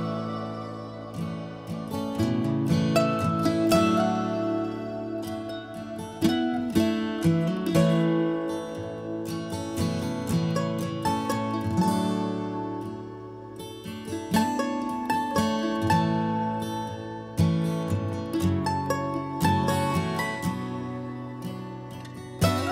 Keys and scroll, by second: 0.4 m, 1.9 Escape, 2.1 Escape, 2.5 h, 3.6 b, 5.2 Escape, 5.3 Escape, 5.5 Escape, 7.2 b, 8.0 Escape, 18.7 b, 20.5-21.4 typing.